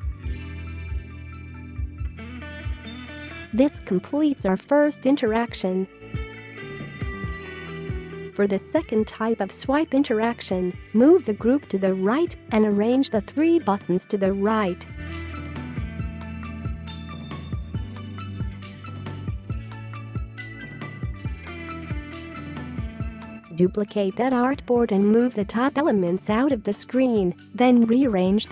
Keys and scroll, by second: 4.1-6.7 space, 7.5 space, 20.1 shift+Right, 23.2 space.